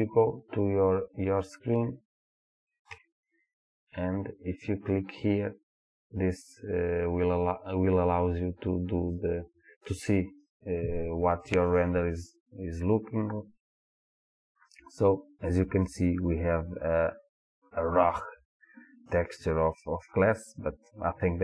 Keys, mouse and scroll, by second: 0.0 click, 3.0 KP_0, 9.2 click.